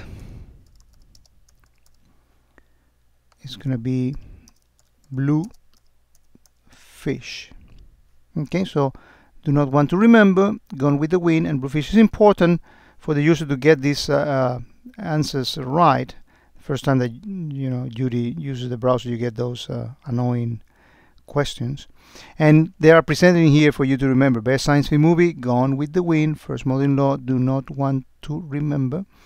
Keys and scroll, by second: 1.2 space, 5.5 space.